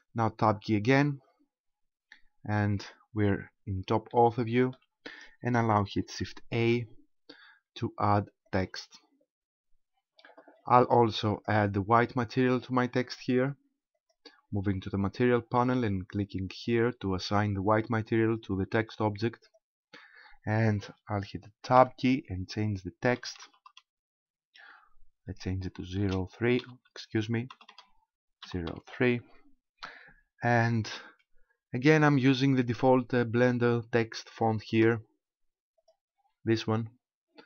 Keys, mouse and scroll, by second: 0.3 Tab, 1.0-1.6 scroll down 5, 2.1-2.4 scroll down 4, 4.1 shift+middle click, 6.6 shift+a, 9.8-11.3 scroll down 1, 11.3 click, 12.5 click, 16.5 click, 21.8 Tab, 23.1 BackSpace, 23.3 BackSpace, 23.5 BackSpace, 23.8 BackSpace, 25.7 shift+0, 26.0 shift+3, 27.5 BackSpace, 27.8 BackSpace, 28.5 0, 28.7 3, 34.9 Tab, 35.8 click.